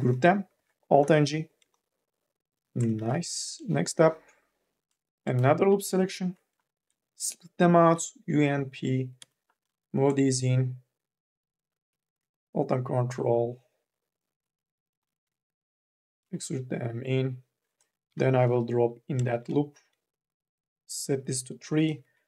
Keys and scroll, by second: 0.8 alt+g, 3.1 q, 5.2 3, 5.7 u, 6.1 l, 7.7 u, 8.1 p, 8.9 2, 9.3 e, 11.7 t, 14.8 e, 17.9 k, 18.3 l, 21.4 3, 21.7 e, 21.9 2.